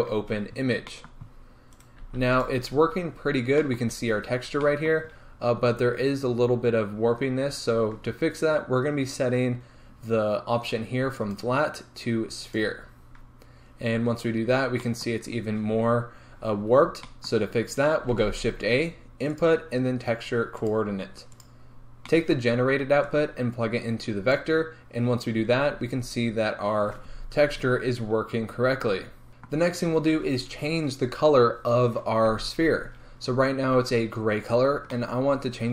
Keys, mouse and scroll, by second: 0.0 click, 1.1-1.7 middle drag, 1.2 scroll down 2, 1.3-1.7 scroll up 2, 1.7 right click, 2.7 scroll up 1, 3.6-12.6 shift+middle drag, 5.5-10.8 scroll up 2, 10.8-12.6 scroll up 1, 12.6-24.4 drag, 13.7-16.2 scroll down 2, 16.2-21.5 scroll down 1, 21.5-24.4 scroll down 1, 25.8-26.8 scroll up 2, 26.8-28.5 scroll up 1, 28.5 scroll down 2, 29.3 g, 33.7-35.7 middle drag, 33.7-35.7 scroll up 2.